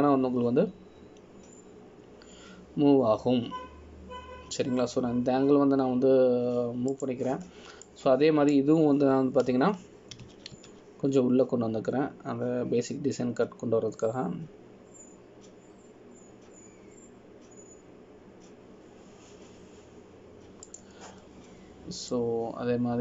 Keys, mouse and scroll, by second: 10.0 click, 12.3 g.